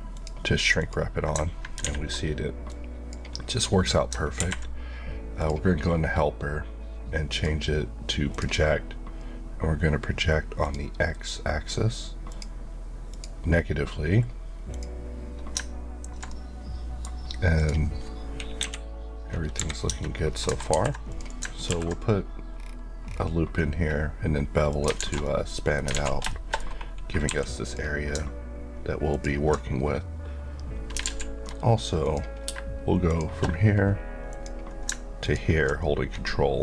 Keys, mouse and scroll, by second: 1.8 a, 2.7 ctrl+click, 5.4 click, 16.3 middle click, 17.5 click, 18.6 KP_1, 19.8 Tab, 20.3 scroll up 1, 20.8 ctrl+r, 21.1 click, 21.3 right click, 21.7 ctrl+b, 22.5-23.1 scroll down 2, 24.7 click, 25.0 alt+z, 25.3 middle click, 26.0 alt+z, 26.3 shift+middle click, 27.3 3, 27.6 click, 31.0 alt+z, 32.0 click, 33.0 shift+click.